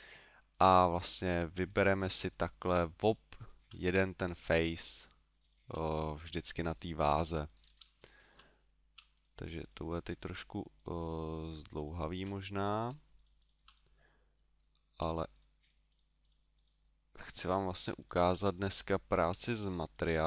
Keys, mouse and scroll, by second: 0.6 right click, 1.2 shift+right click, 1.6 shift+right click, 2.0 shift+right click, 2.3 shift+right click, 2.6 shift+right click, 3.4 shift+right click, 3.8 middle click, 4.9 shift+right click, 5.4 shift+right click, 6.0 middle click, 7.5-7.9 scroll up 5, 8.0 shift+middle click, 9.2 shift+right click, 9.4 shift+right click, 9.6 shift+right click, 9.9 shift+right click, 10.2 shift+right click, 10.8 shift+right click, 11.4 shift+right click, 11.8 shift+right click, 12.4 middle click, 13.2 shift+right click, 13.4 shift+right click, 13.7 middle click, 15.4 shift+right click, 15.6 shift+right click, 16.2 shift+right click, 16.5 shift+right click, 16.6 shift+right click, 17.1 shift+right click, 17.4 shift+right click, 18.6 middle click, 19.9 shift+right click.